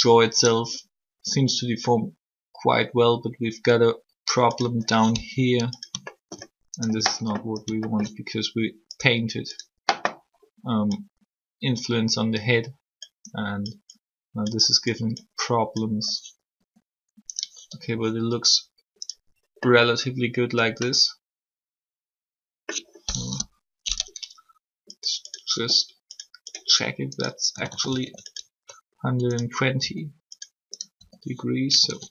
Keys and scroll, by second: 5.1 r, 16.5 r, 23.2 3, 27.2-27.6 typing, 27.7 alt+r, 29.8 r, 31.6-32.1 typing.